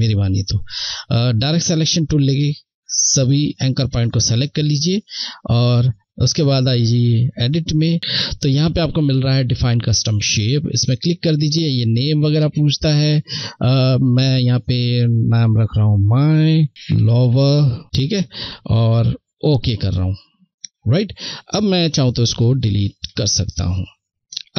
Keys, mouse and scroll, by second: 6.0 click, 9.3 click, 14.4 m, 15.0 space, 16.5-17.1 typing, 18.5 click, 22.1 Delete.